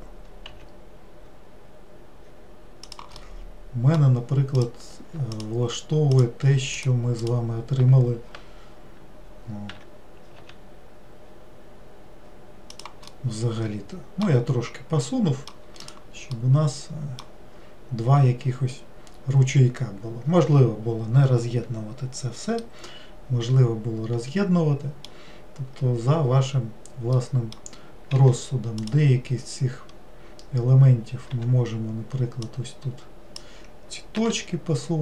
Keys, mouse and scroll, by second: 3.2-4.6 middle drag, 4.6 click, 5.4 alt+click, 6.2 alt+click, 6.8 alt+click, 7.2 alt+click, 9.8 e, 13.2-15.9 middle drag, 15.9 click, 16.4-19.4 middle drag, 22.7-25.8 middle drag, 27.2-28.2 middle drag, 28.2 2, 28.8 click, 29.9-30.2 scroll up 2, 31.4 1, 32.5 click.